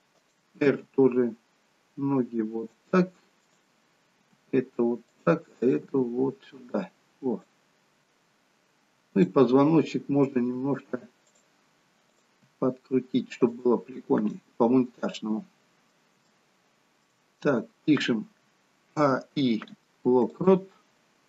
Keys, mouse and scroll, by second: 0.7 g, 3.5 click, 4.3 g, 5.8 click, 6.2 g, 8.1-9.0 scroll up 3, 9.2 click, 10.5 r, 12.2 click, 12.6 r, 14.4 middle click, 16.4 shift+middle click, 17.4-19.0 scroll down 3, 19.0 a, 19.4 i.